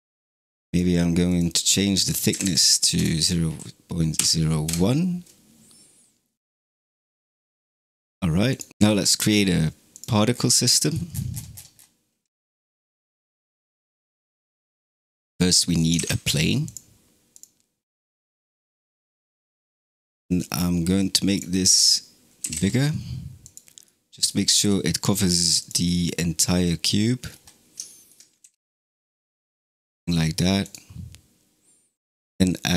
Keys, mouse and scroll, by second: 0.7-2.5 drag, 8.1 scroll down 5, 8.5 click, 9.1 space, 9.8 click, 10.2 scroll down 5, 10.6-11.0 middle drag, 11.0-11.9 scroll down 21, 12.1 click, 12.4-13.6 middle drag, 13.6-14.6 drag, 14.6-15.8 shift+middle drag, 15.8 shift+a, 18.2 s, 21.6 scroll down 5, 22.3 g, 23.7-24.4 middle drag, 24.4 s, 25.7-27.1 middle drag, 27.1 scroll up 5, 27.7-28.3 shift+middle drag, 28.3 g, 29.4-29.7 scroll down 4, 30.5 click.